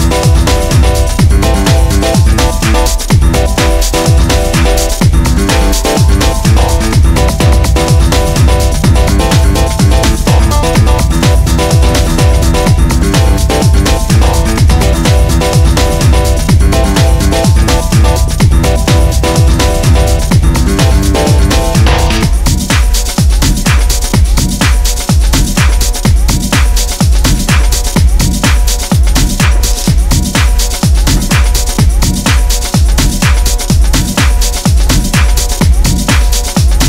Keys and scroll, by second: 0.8 ctrl+z, 5.9 4, 7.5 3, 8.1 ], 13.9 Delete, 20.1 ], 28.8 ], 36.4 ].